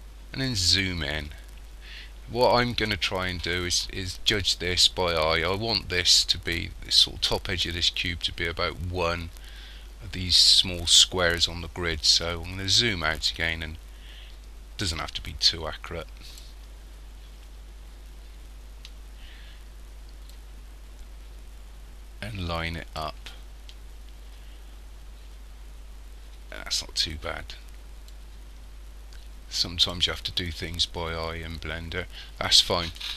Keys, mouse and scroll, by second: 0.3-3.3 scroll up 10, 3.3-6.4 scroll up 1, 12.0-14.9 scroll down 9, 15.0 click, 16.8-17.4 scroll up 6, 17.9 scroll up 2, 18.4-20.3 scroll down 7, 20.4 click, 23.6-24.9 scroll up 6, 24.9-26.1 scroll up 3, 26.2-28.1 scroll down 11, 28.1 click, 30.5-31.4 scroll up 10, 32.3 scroll down 5.